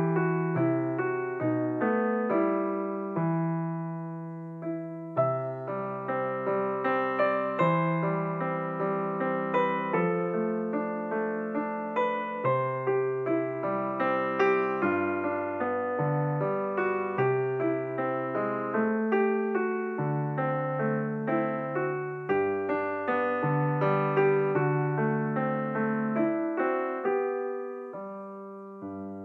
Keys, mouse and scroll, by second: 3.1 Tab, 4.1-4.6 scroll down 2, 4.6-6.6 middle drag, 6.6 KP_7, 8.0-11.1 drag, 12.0-12.7 scroll down 2, 12.7-13.1 scroll down 2, 14.4 click, 15.7-18.7 drag, 19.5-21.9 drag, 21.9-24.6 scroll up 5, 24.6-25.2 scroll down 1, 25.2 Tab, 26.1 BackSpace, 27.1 shift+e, 28.4 Tab.